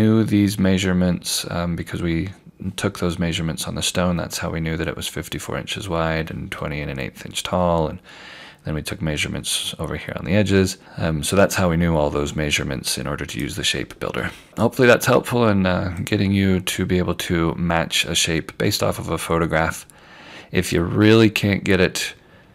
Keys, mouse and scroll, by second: 10.4 scroll down 1, 13.4 click, 16.1 click.